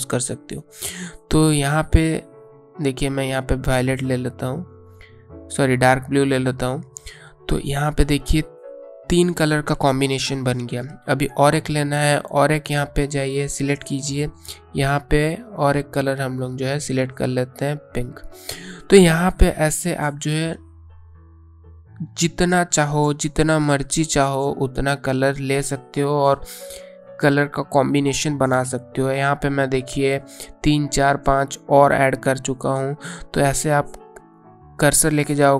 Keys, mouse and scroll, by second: 2.9 click, 6.6 click, 12.8 click, 17.5 click, 22.0 click, 31.3 click.